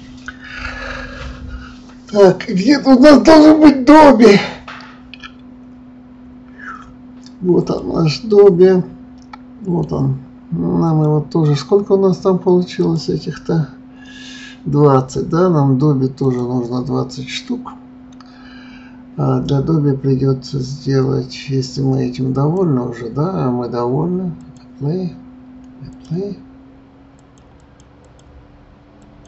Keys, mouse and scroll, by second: 7.6 click, 8.3-10.8 middle drag, 10.8 click, 12.8 click, 16.2 click, 22.3 click, 24.4-29.2 drag.